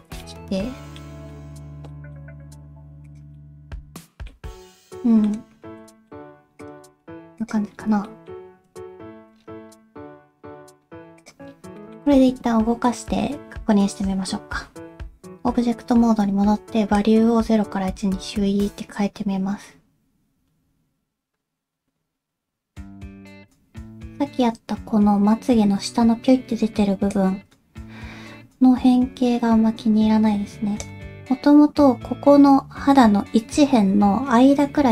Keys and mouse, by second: 0.2 middle click, 1.3 middle click, 1.9 middle click, 2.4 g, 3.4 middle click, 5.0 middle click, 5.9 shift+middle click, 6.6 click, 6.9 g, 8.1 middle click, 8.7 click, 11.8 middle click, 12.2 Tab, 17.0-23.5 drag, 27.1-30.9 drag.